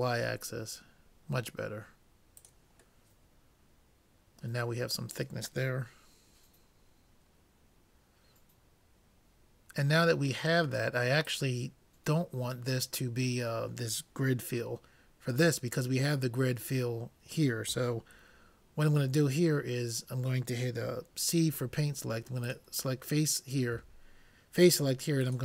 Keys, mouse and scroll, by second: 3.0-4.9 middle drag, 11.3-13.0 drag, 22.4-24.1 drag, 23.8 c.